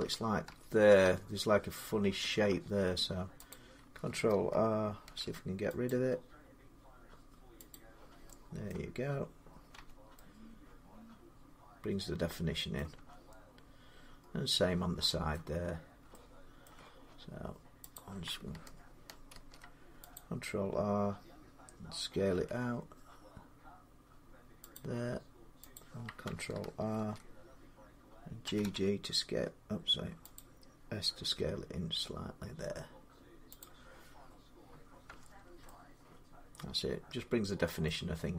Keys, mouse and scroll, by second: 0.4 Tab, 0.9 Tab, 2.6 Tab, 3.3 click, 4.9 ctrl+r, 5.7 click, 7.6 click, 8.5 middle click, 9.6 Tab, 12.6 middle click, 12.8 Tab, 15.5-15.9 scroll up 3, 16.5 shift+middle click, 17.8 click, 18.0 scroll down 3, 19.2 ctrl+r, 19.2 scroll up 3, 19.3 shift+middle click, 20.0 click, 22.1 s, 24.6 click, 25.6 click, 26.8 ctrl+r, 28.3 typing, 30.1-31.8 typing, 30.2 click, 33.4 click, 34.9 Tab, 35.2 scroll down 1, 37.5 middle click.